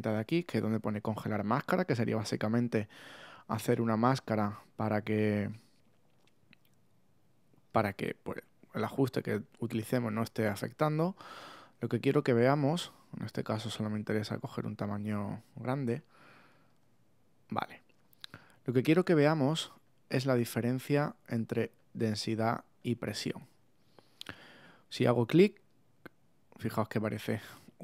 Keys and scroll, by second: 3.8 shift+<.